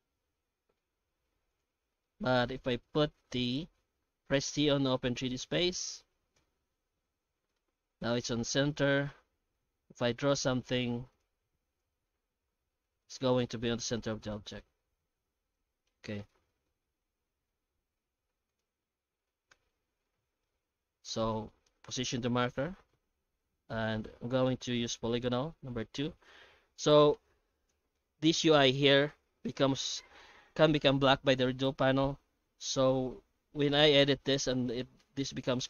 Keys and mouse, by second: 0.8 ctrl+shift+x, 2.0-16.6 shift+middle drag, 16.9 shift+middle click, 17.9 ctrl+shift+x, 20.0-35.6 shift+middle drag.